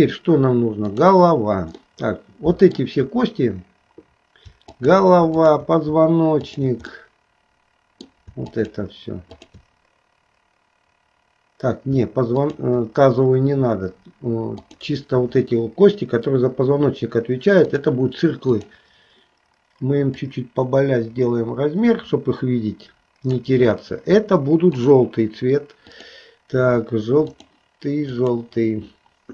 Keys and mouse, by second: 1.0 click, 2.0 middle click, 5.6 shift+click, 7.0-8.2 middle drag, 8.7 shift+click, 9.5 shift+click, 14.7-18.0 drag, 18.6 click, 20.2-23.6 drag, 24.8 click, 25.9-27.7 drag, 28.3 click.